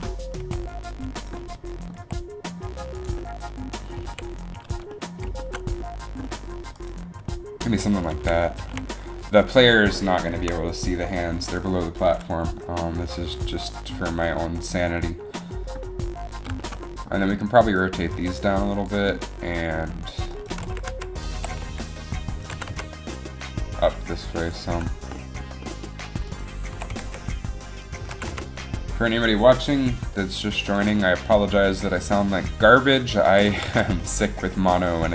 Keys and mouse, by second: 0.5 r, 2.1 r, 4.1 a, 5.9 r, 7.4 r, 8.4 a, 8.8 a, 12.6 r, 12.6 a, 15.3 r, 15.3 a, 17.0 r, 17.0 a, 17.1 r, 17.1 a, 18.4 r, 19.9 r, 20.7 r, 21.5 r, 22.6 r, 26.8 r, 28.1 r, 28.3 r, 31.8 r, 33.4 r.